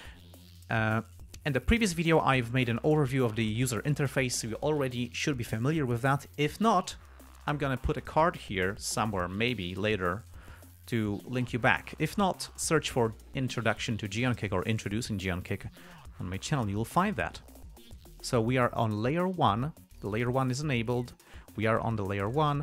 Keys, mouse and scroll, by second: 19.7 click, 20.3 click, 22.3 click.